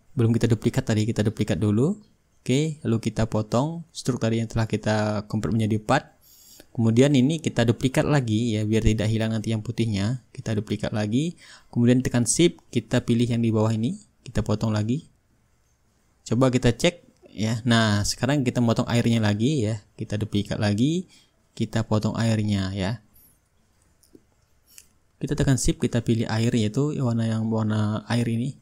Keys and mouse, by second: 0.3 click, 1.5-2.6 right drag, 2.6-3.7 drag, 4.2-6.3 shift+drag, 6.6-9.2 drag, 10.6-11.8 right drag, 11.8-13.9 drag, 14.4-15.5 drag, 15.6-19.6 drag, 18.9 ctrl+z, 20.3-21.5 right drag, 21.8-22.9 drag, 27.7-28.6 drag.